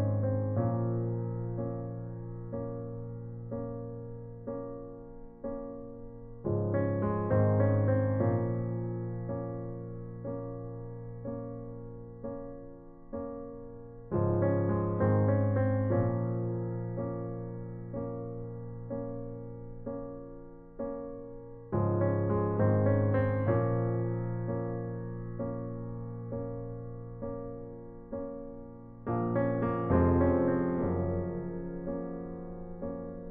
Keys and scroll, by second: 5.7 space, 8.2 space, 11.2-11.7 typing, 13.4-14.3 typing, 18.6 space, 20.7 space.